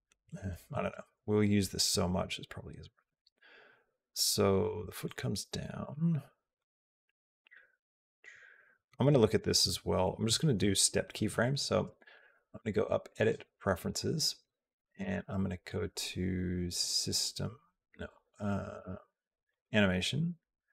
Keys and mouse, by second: 4.8 click, 5.6 click, 6.4-8.9 drag, 9.1 click, 12.1-13.2 drag.